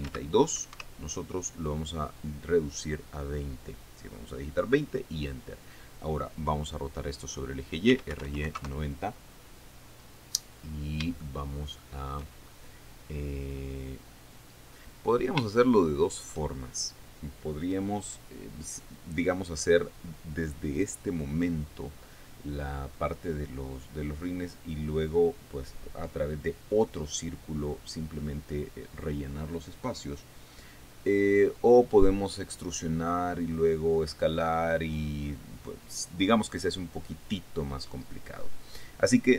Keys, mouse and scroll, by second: 0.3-1.1 typing, 1.3 Escape, 8.2-9.2 typing, 11.1-11.6 scroll up 2, 11.8-12.9 shift+middle drag, 13.0-13.6 shift+scroll up 3, 15.6 scroll up 2, 16.1 shift+middle click.